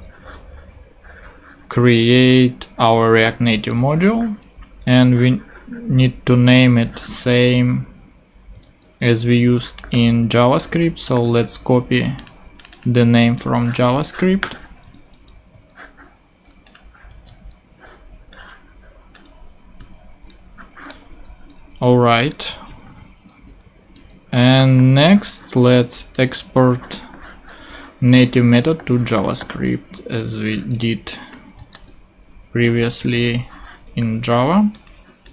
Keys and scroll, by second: 3.6 super+Tab, 8.6 super+Tab, 13.1 super+c, 13.2 super+Tab, 14.9 super+Tab, 17.1 super+v, 19.8 BackSpace, 21.4 BackSpace, 22.4 Down, 22.7 super+Right, 23.2 super+Return, 23.6 super+Return, 23.9 super+Tab, 31.7 super+Tab, 34.0 super+v.